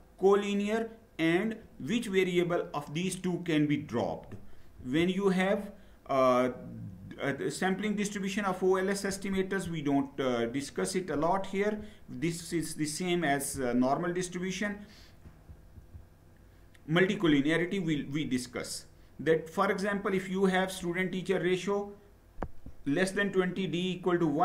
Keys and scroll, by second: 4.6 Down, 9.1 Up, 15.0 Down, 15.6 Down.